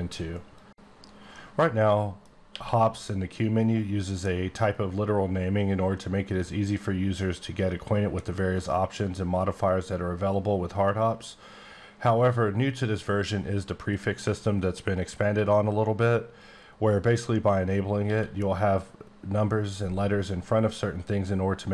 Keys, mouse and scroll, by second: 2.5 q, 12.1 click, 14.6 click, 18.0 q.